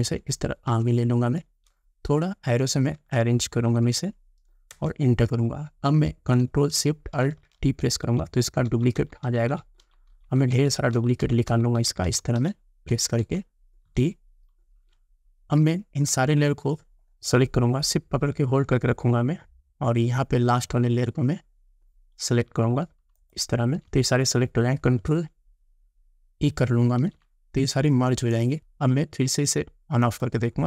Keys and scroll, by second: 3.0 Left, 8.1 ctrl+alt+shift+t, 27.0 ctrl+e.